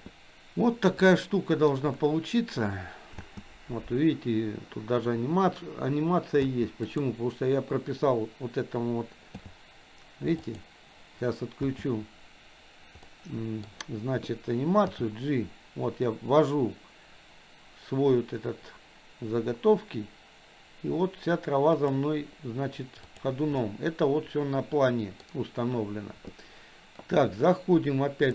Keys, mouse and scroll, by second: 1.1-1.7 middle drag, 3.2 space, 6.4 space, 6.8 click, 9.3 g, 11.6 space, 13.1 middle click, 14.9 g, 23.0 click, 23.6-25.2 middle drag.